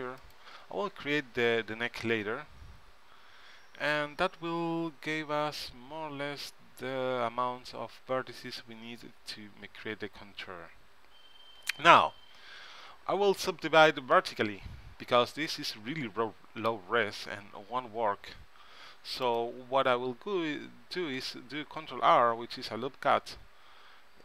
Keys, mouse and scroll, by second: 17.1 ctrl+r, 21.3 ctrl+r.